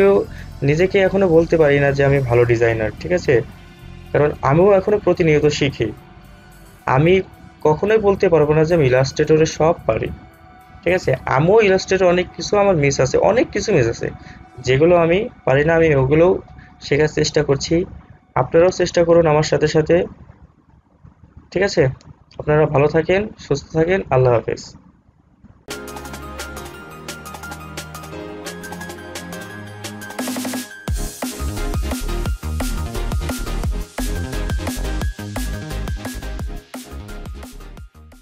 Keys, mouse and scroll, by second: 22.6-25.6 drag.